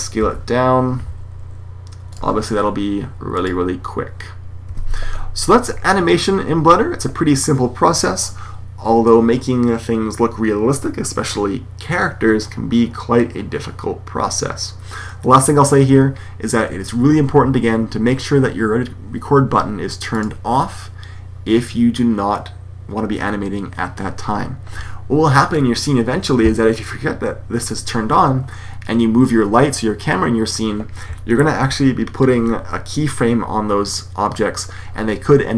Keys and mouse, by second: 0.0 s, 3.3 click, 4.5 Escape.